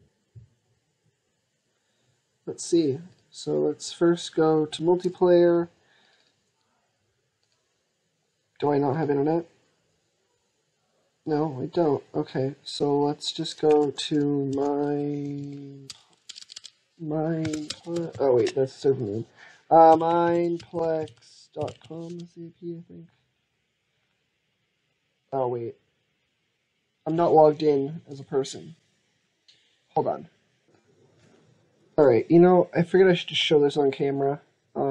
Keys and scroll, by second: 13.7 ctrl+a.